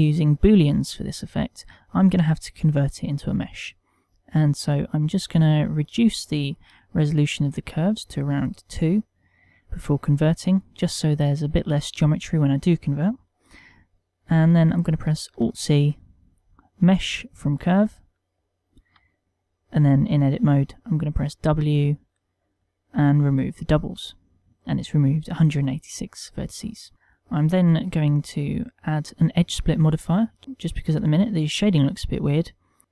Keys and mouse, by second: 5.4 click, 5.6 click, 5.8 click, 6.0 click, 6.1 click, 6.3 click, 6.5 click, 6.8 click, 6.9 click, 7.3 click, 8.4 middle click, 15.2 alt+c, 18.9 Tab, 19.6 middle click, 21.1 w, 26.9 Tab, 26.9 middle click, 28.1 click, 28.8 click, 30.4 middle click, 30.9 middle click.